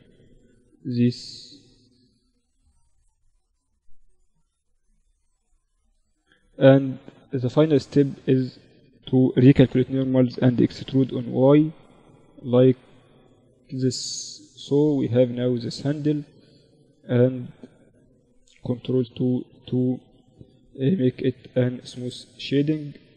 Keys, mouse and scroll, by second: 0.7 s, 2.1 z, 2.5 z, 2.9 z, 3.3 Tab, 4.1 Tab, 4.6 a, 4.8 a, 6.1 KP_7, 7.1 a, 7.3 a, 8.5 ctrl+n, 9.6 e, 12.7 z, 13.5 z, 15.5 Tab, 16.0 z, 16.2 z, 17.7 ctrl+2, 19.0 KP_1, 22.2 Tab.